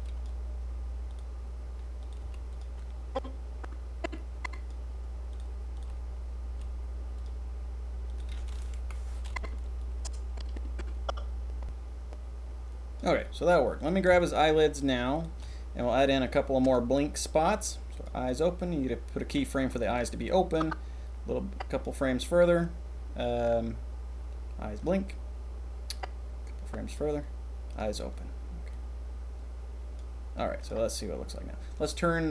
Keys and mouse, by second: 1.0 click, 1.9 click, 2.1 g, 2.4-4.6 drag, 5.7 click, 6.4 g, 8.0 click, 8.7 Delete, 9.3 drag, 12.2-13.0 drag, 13.8 click, 14.2 shift+drag, 15.9-16.8 drag, 19.8 click, 20.5 click, 22.6 click, 22.9 click, 26.0-27.0 drag, 28.7-30.0 drag, 30.6 drag.